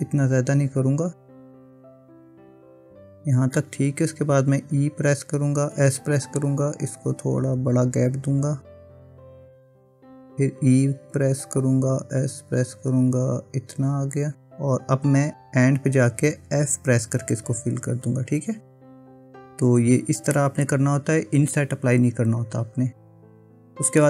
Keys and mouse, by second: 1.5 ctrl+z, 4.7 e, 10.3 e, 16.8 f, 20.4-22.6 middle drag, 22.7-24.0 middle drag.